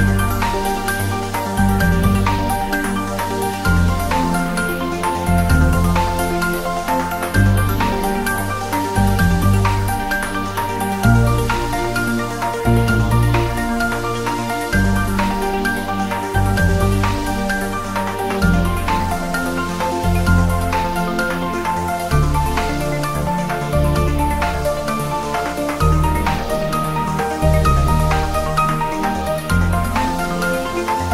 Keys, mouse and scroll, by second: 1.6-2.2 scroll up 1, 4.9 scroll up 1, 5.7-6.0 drag, 11.3-11.9 drag, 15.9 scroll down 1, 17.2 click, 18.7-19.3 click, 20.1-20.8 scroll down 1, 21.0 click, 21.8-24.3 typing, 22.7 click, 23.4 click, 24.1 click, 25.6 click, 25.8 s, 26.8 click, 26.9 scroll up 1, 27.3 g, 27.4 Left, 28.5 Return, 28.7-29.1 scroll down 1, 29.1-29.5 drag, 30.7 Tab.